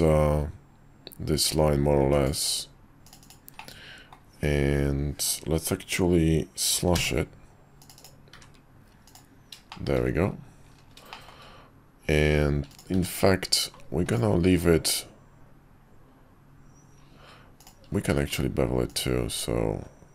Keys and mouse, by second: 3.7-8.1 middle drag, 9.1 click, 9.7 shift+click, 11.1 shift+click, 12.9 q, 17.9 q.